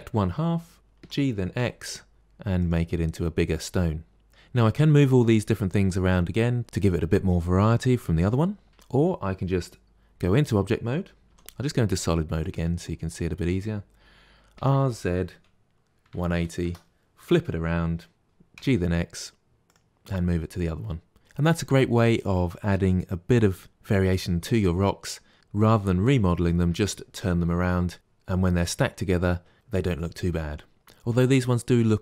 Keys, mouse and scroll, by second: 1.0 g, 4.1-5.6 middle drag, 8.7 Tab, 11.3 z, 14.5 r, 18.2 g, 20.0-21.2 middle drag.